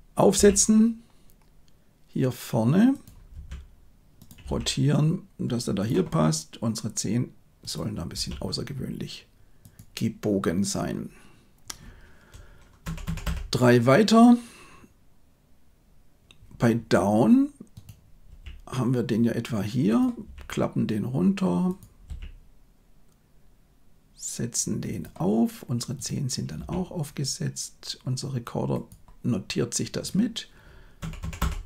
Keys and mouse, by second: 0.3 g, 3.3 r, 4.4 g, 8.0 r, 12.8 Right, 13.0 Right, 13.2 Right, 18.2 g, 20.2 r, 22.0 g, 25.9 click, 26.5 r, 30.9 Right, 31.1 Right, 31.3 Right.